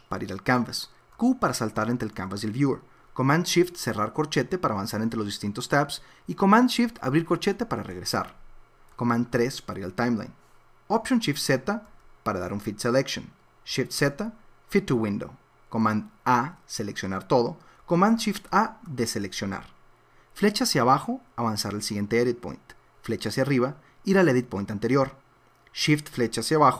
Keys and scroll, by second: 4.0 shift+super+], 7.2 shift+super+[, 9.3 super+3, 11.9 alt+shift+,, 14.0 shift+z, 16.2 super+a, 18.5 shift+super+a, 20.4 Down, 23.1 Up, 26.1 shift+Down.